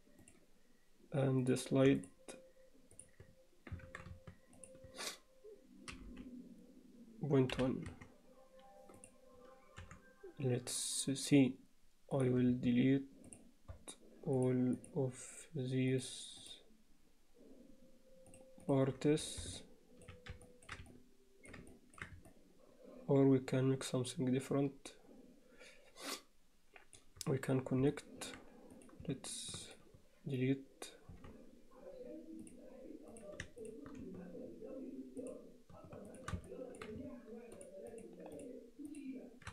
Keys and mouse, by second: 2.0 shift+click, 3.9 ctrl+z, 4.6 shift+click, 5.9 g, 9.8 3, 12.2 click, 13.3 shift+click, 14.4 shift+click, 14.8 shift+click, 16.0 shift+click, 16.4 shift+click, 18.3 shift+click, 18.7 shift+click, 19.6-20.1 alt+middle drag, 20.5 ctrl+middle click, 20.9 alt+middle click, 21.7 ctrl+alt+middle click, 22.3-27.0 middle drag, 27.9 alt+middle click, 28.8 click, 29.7 shift+click, 31.1 x, 33.1 click, 35.2 shift+click, 36.1 shift+click, 36.5 alt+middle click, 37.6 shift+click, 38.0 shift+click, 38.4 shift+click, 38.9 shift+click.